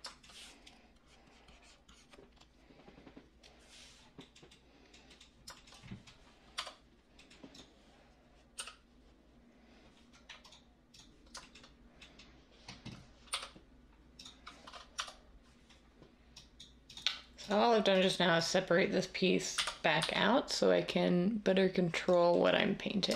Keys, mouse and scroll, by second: 6.5 Tab, 8.5 i, 13.3 p, 14.9 Tab, 19.5-20.0 typing.